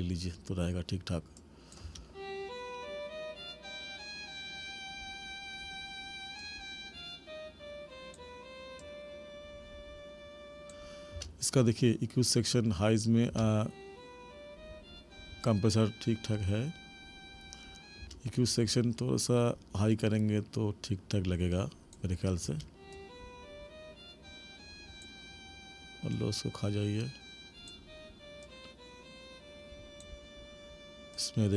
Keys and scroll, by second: 1.8 space, 11.1 space, 13.3 space, 18.0 space, 22.4 space.